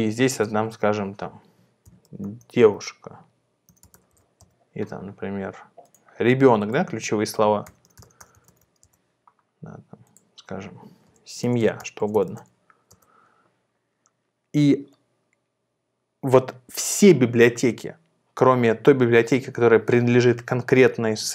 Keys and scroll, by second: 1.6-4.6 typing, 7.4-8.9 typing, 10.8-12.7 typing, 13.0 Return.